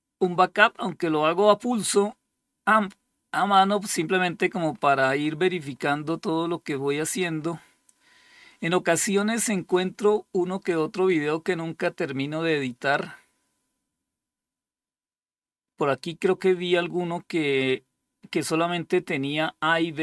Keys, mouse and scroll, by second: 3.7-5.8 scroll up 3, 5.8-6.8 scroll up 1, 6.8-7.4 scroll up 1, 7.4-20.0 scroll down 2.